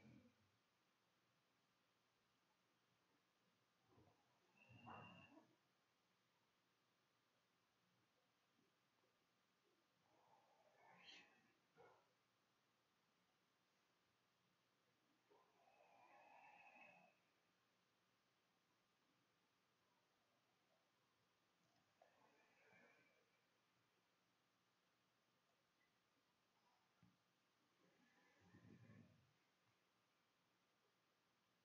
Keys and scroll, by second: 2.6 ctrl+shift+z, 2.7 ctrl+shift+s.